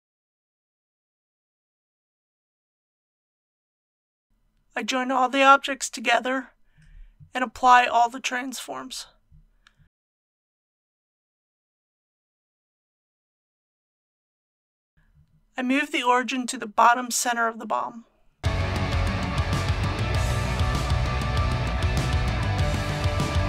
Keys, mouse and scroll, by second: 5.5 ctrl+click, 6.2 ctrl+click, 6.9 ctrl+click, 7.5 ctrl+click, 9.0 ctrl+j, 12.8 ctrl+a, 14.4 click, 14.9 Return, 16.1-16.6 typing.